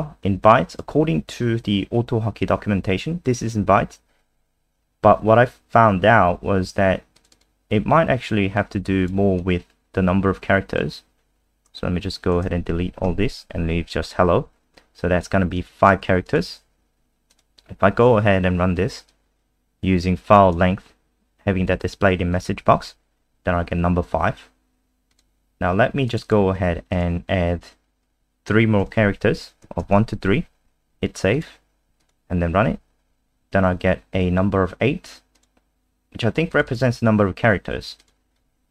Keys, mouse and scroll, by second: 0.4 click, 7.3 click, 8.6 click, 11.7 BackSpace, 13.0 ctrl+s, 15.6 click, 16.6 alt+F4, 17.3 click, 22.7 F5, 25.1 click, 26.2 click, 26.9 click, 28.5-29.3 typing, 29.8 ctrl+s, 31.3 click, 32.5 F5, 35.3 click, 36.6 click, 38.0 click.